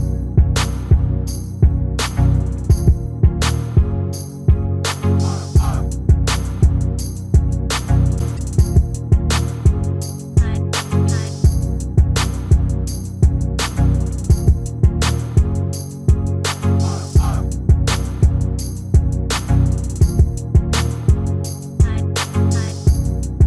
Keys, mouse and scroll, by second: 5.1 middle click, 6.8-7.8 drag, 8.1 s, 8.7 a, 9.1 r, 10.9 s, 12.9 s, 15.8 g, 17.3-19.0 middle drag, 19.0 click, 20.5-22.2 drag.